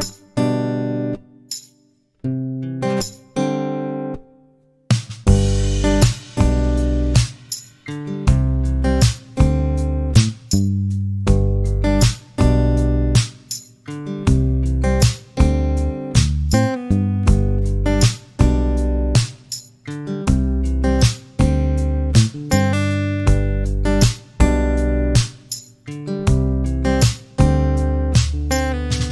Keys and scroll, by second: 0.1 space, 9.3 Delete, 18.7 t, 21.0-22.4 typing, 27.1 space.